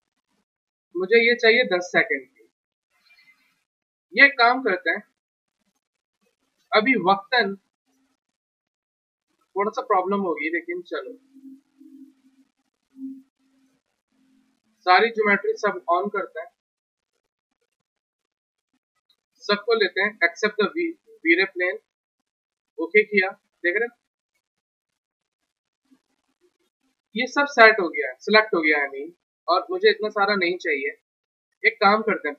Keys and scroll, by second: 5.1 1, 7.9 w, 31.5 w.